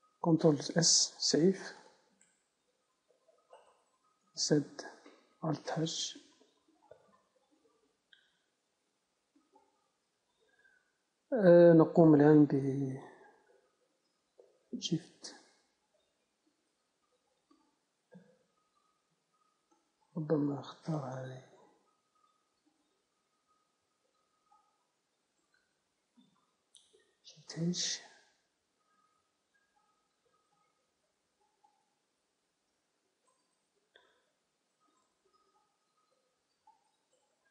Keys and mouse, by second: 0.8 ctrl+s, 2.1-4.0 drag, 3.0 s, 4.2 click, 4.5 ctrl+s, 4.6-6.0 drag, 4.6 z, 6.0 h, 7.9 KP_0, 10.1 alt+h, 11.8 a, 13.8-15.3 right drag, 15.3 Tab, 17.0 Tab, 20.4-27.5 drag, 27.5 shift+h, 28.2 Tab, 29.1 a, 29.3 a, 32.1-37.5 drag.